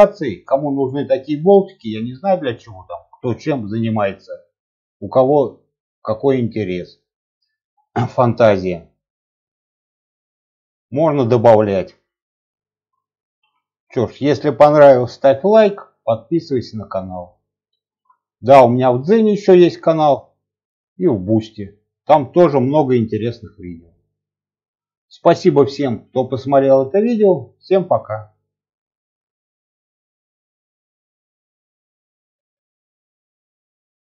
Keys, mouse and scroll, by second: 0.1-0.4 scroll up 1, 0.4 scroll down 1, 0.7 middle click, 1.0 scroll up 2, 1.4 scroll down 1, 1.7-4.4 middle drag, 4.7-5.0 scroll up 1, 5.0 scroll down 1, 5.3-7.4 middle drag, 7.9 scroll up 2, 8.1 scroll down 1, 8.6 shift+middle click, 9.8 scroll up 2, 10.2-10.5 scroll down 1, 10.5 shift+middle click, 11.1-11.4 scroll down 1, 11.4 middle click, 12.1 scroll up 1, 12.5 shift+middle click, 13.0 middle click, 13.5 shift+middle click, 17.2-17.9 shift+middle drag, 18.1-18.6 middle drag, 18.9-19.3 scroll up 1, 19.3 shift+middle click, 19.9-20.4 scroll down 1, 20.4 middle click, 21.1-21.7 scroll up 3, 21.7 shift+middle click, 22.3-22.6 scroll down 1.